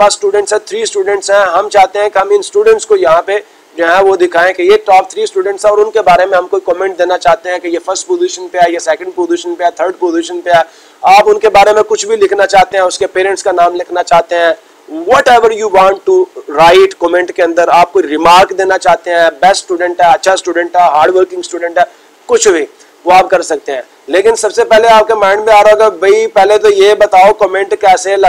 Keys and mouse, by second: 1.5 click, 2.0 click, 26.4 click, 26.7 click, 27.7 click.